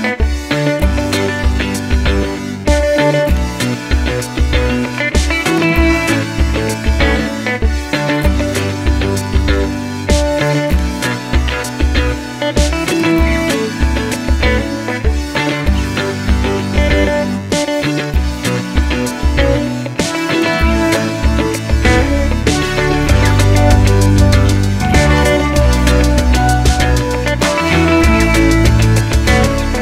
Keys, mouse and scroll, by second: 0.4 click, 0.7 click, 1.3 alt+d, 2.2 click, 3.2 middle click, 3.2 g, 3.6 click, 3.8-5.5 middle drag, 5.5 click, 5.9 click, 6.4-7.6 middle drag, 6.8 alt+d, 7.6 r, 9.0 click, 9.4 g, 11.7 click, 13.8-15.6 middle drag, 15.0 s, 15.6 click, 16.0 alt+d, 16.5 click, 16.8 r, 17.3 click, 17.4 s, 18.1 click, 18.9 click, 19.5 click, 20.0 alt+d, 20.6 r, 21.4 click, 23.2 click, 23.9 alt+d, 25.1 click, 25.3 r, 26.6 click, 27.6-28.9 middle drag, 27.6 g, 28.9 click, 29.1 shift+Tab, 29.4-29.8 middle drag.